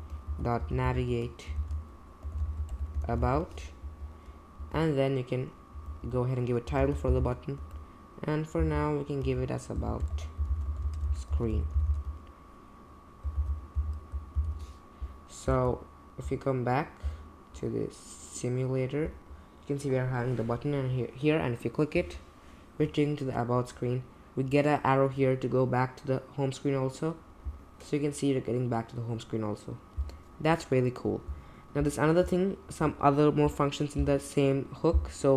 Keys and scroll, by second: 0.0-3.7 typing, 3.8 Right, 4.6 Right, 5.5-12.4 typing, 13.3 super+j, 13.7 typing, 14.3 super+j, 15.5 super+Tab.